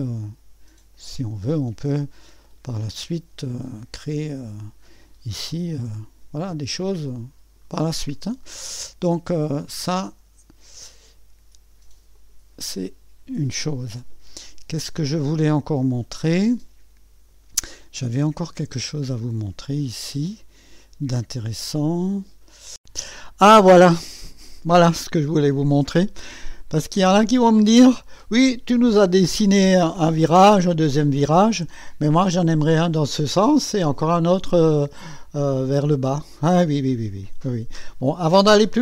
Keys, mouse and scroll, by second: 1.0 click, 2.4 click, 3.9 click, 5.5 2, 5.7 Return, 6.9 click, 9.5 click, 12.1 click, 13.3 Delete, 15.0-17.5 drag, 18.2-19.4 drag, 19.9-22.5 drag, 23.1-24.5 drag, 26.3-27.1 scroll up 1, 27.1-27.6 scroll down 1, 28.0-29.8 drag, 31.2-32.3 drag, 34.7-35.9 right drag, 37.1 click.